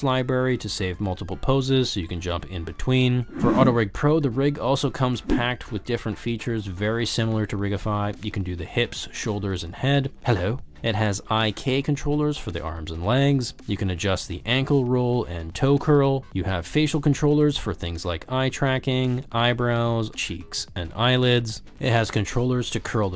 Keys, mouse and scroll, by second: 0.3 click, 1.2 drag, 2.6 drag, 3.0 click, 4.1 ctrl+z, 4.3 shift+drag, 8.6 g, 9.1 ctrl+z, 9.6 click, 9.7 ctrl+z, 9.8 r, 10.7 ctrl+z, 10.7 g, 11.5 ctrl+z, 12.2 ctrl+z, 14.1 click, 14.1 g, 14.4 ctrl+z, 15.6 ctrl+z, 15.7 r, 17.1 alt+z, 17.4 alt+z, 18.0 g, 20.0 click, 20.2 ctrl+z, 20.3 g, 20.9 click, 21.1 ctrl+z, 21.5 shift+drag, 21.8 shift+click, 22.4 click, 22.6 shift+click, 23.0 s.